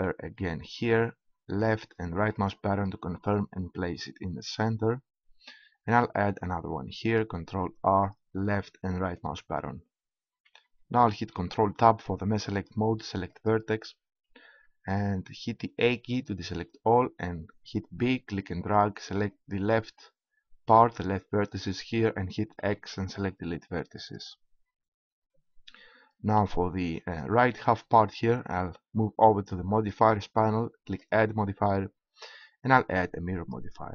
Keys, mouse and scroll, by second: 0.3 ctrl+r, 2.4 right click, 4.2-5.8 right drag, 4.5-5.8 drag, 4.5-5.8 middle drag, 7.0 ctrl+r, 9.2 click, 9.8-11.2 right drag, 11.4 ctrl+Tab, 14.9 a, 17.2 b, 22.7 x.